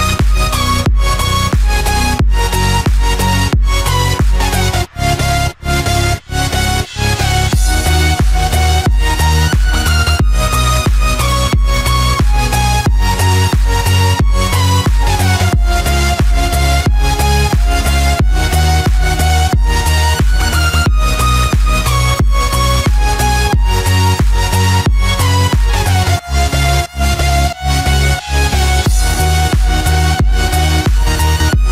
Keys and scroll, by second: 26.2 ctrl+-, 27.0 ctrl+0, 27.6 ctrl+=.